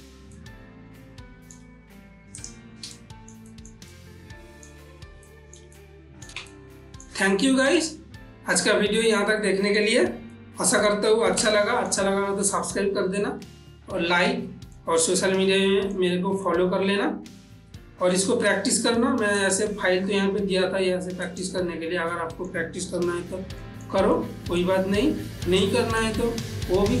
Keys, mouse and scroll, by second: 0.1 ctrl+s, 0.7-2.7 ctrl+middle drag, 2.7 click, 3.3 shift+middle click, 4.3-10.7 ctrl+middle drag, 10.7 shift+middle click, 11.9-15.1 shift+middle drag, 15.1-19.7 ctrl+middle drag, 19.7 click, 21.6 click, 22.6 middle click, 23.3 ctrl+s, 24.0 ctrl+middle click, 24.6-26.0 middle drag, 26.0-27.0 ctrl+middle drag.